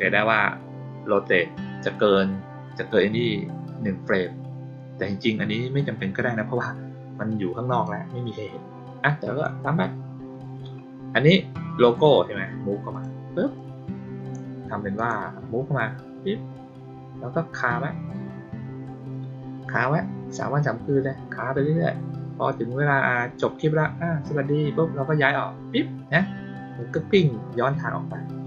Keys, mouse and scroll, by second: 7.6 click, 9.0-9.3 drag, 11.8 click, 12.8 click, 13.5-14.2 drag, 14.9 click.